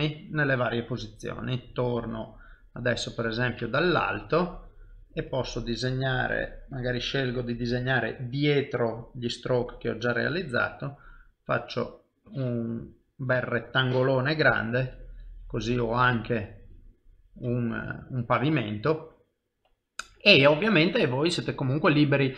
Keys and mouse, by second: 0.0 middle click, 2.7 KP_7, 3.6 ctrl+middle click, 6.7 click, 14.2 middle click, 15.1 ctrl+middle click, 16.0 middle click, 16.9 ctrl+middle click, 17.5 shift+middle click, 17.9 middle click.